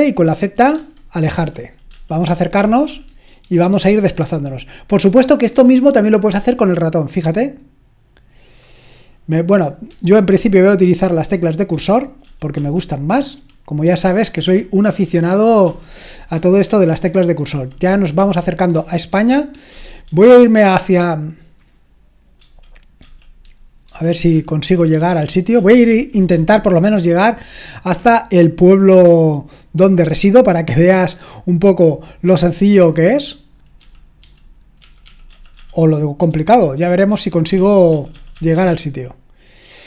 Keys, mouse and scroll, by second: 0.7-4.2 typing, 9.9 Left, 11.7-12.5 typing, 13.3 Down, 13.8 Right, 15.1-20.0 typing, 22.4-26.3 typing, 28.1-30.3 scroll down 1, 30.3-30.9 scroll down 1, 30.9-31.4 scroll down 1, 31.4-33.8 scroll down 1, 33.8 End, 34.2 End, 34.4-35.0 typing, 37.1-38.7 typing.